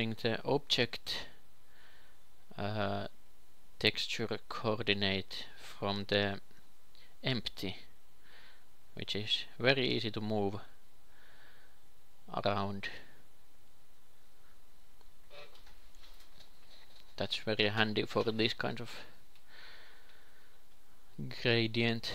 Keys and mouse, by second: 5.2 s, 6.2 s, 8.8 g, 11.5 s, 12.6 g, 12.8 g, 13.8 s, 16.1 g, 16.5 g, 18.3 s, 19.9 g, 21.3 g.